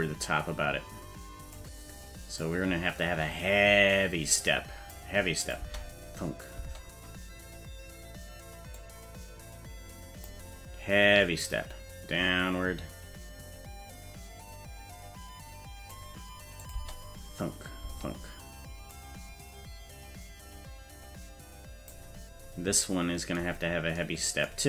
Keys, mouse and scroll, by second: 2.4-4.9 drag, 5.4 click, 5.6 space, 6.6 space, 8.8-10.3 drag, 11.4-16.0 drag, 16.6-17.7 drag, 16.7 space, 17.8 space, 18.9-21.9 drag, 22.3-22.8 scroll down 2.